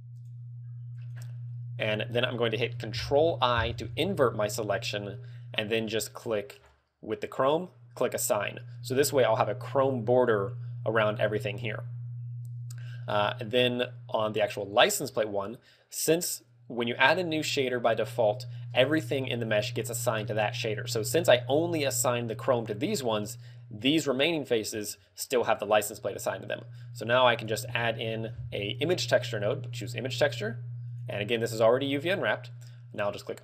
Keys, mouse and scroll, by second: 0.6 shift+right click, 1.4 shift+right click, 2.2 shift+right click, 3.4 ctrl+i, 6.7 click, 8.2 click, 9.3 Tab, 14.9 click, 21.9 Tab, 24.3 right click, 25.0 Tab, 26.9 click, 27.9 shift+a, 30.3 g, 31.1 click, 33.1 click.